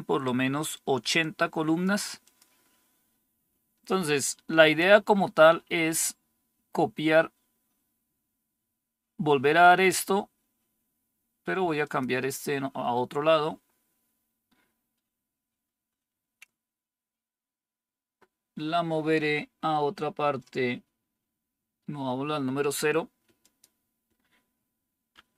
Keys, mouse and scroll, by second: 1.1 click, 2.2 click, 5.4-6.3 scroll down 2, 6.3-11.7 scroll down 1, 11.7 click, 23.3 click.